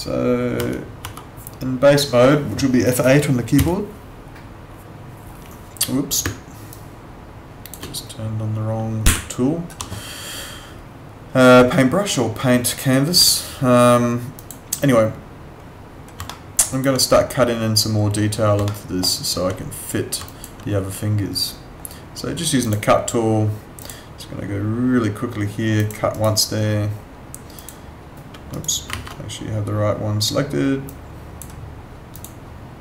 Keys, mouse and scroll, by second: 0.6 F7, 1.0 F6, 3.5 F8, 6.2 space, 6.7 click, 9.0 w, 14.4 click, 16.3 alt+middle click, 16.6 alt+right click, 18.6 alt+middle click, 19.0 alt+right click, 20.3 alt+click, 22.6 click, 26.1 right click, 27.6 click, 28.5 right click, 30.8 click.